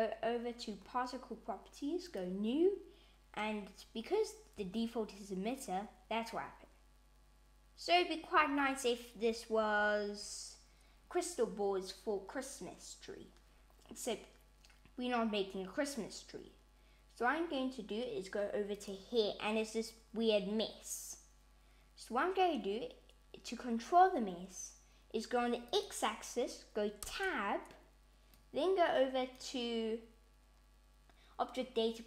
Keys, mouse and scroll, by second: 2.1 click, 4.6 space, 8.3 space, 9.6 shift+Left, 18.8 click, 25.7 click, 27.1 Tab, 28.4 click.